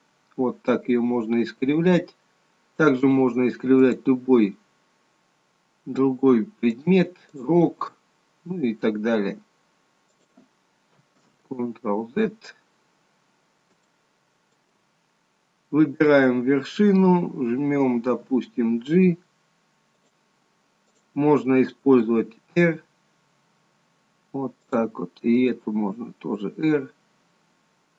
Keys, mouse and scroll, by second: 4.0 click, 4.3 g, 7.5 click, 7.8 g, 11.3 ctrl+z, 13.1 scroll down 2, 14.0 shift+middle click, 16.1 click, 18.2 g, 21.3 click, 21.9 r, 25.5 click, 25.9 r.